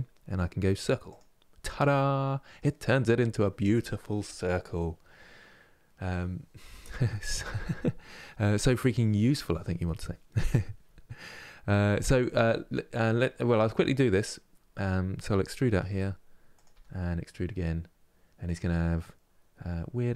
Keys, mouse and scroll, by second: 1.5-15.5 middle drag, 15.5 e, 16.4 e, 19.9 e.